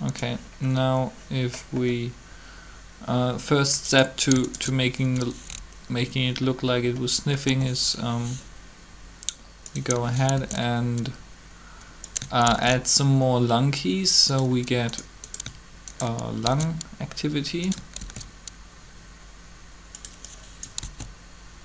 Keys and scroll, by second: 7.4 g, 10.3 shift+d, 12.5 shift+d, 16.4 shift+d, 18.0 shift+d, 20.8 alt+a.